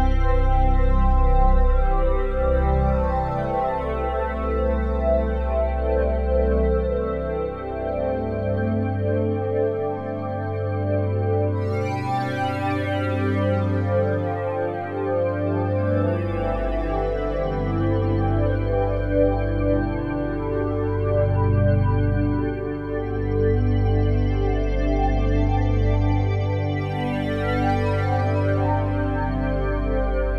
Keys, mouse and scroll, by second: 1.7-6.9 drag, 6.9 Tab, 7.5 Tab, 9.7 0, 11.3 g, 12.6-15.8 drag, 15.8 r, 16.1 y, 18.9-22.9 drag, 22.9 ctrl+z, 24.3 Tab, 24.8-30.3 drag.